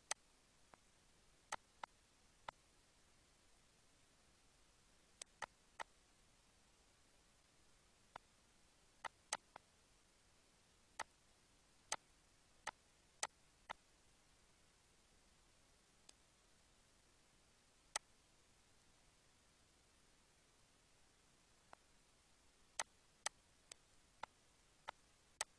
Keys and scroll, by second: 19.6 1, 19.8 Return.